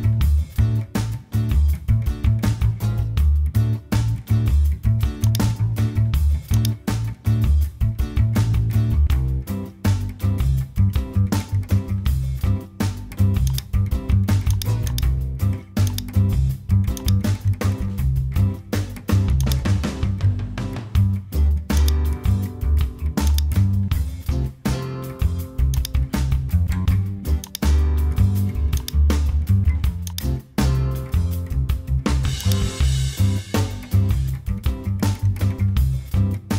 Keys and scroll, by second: 2.2 super+j, 3.9 super+t, 9.5 Return, 23.9 Return.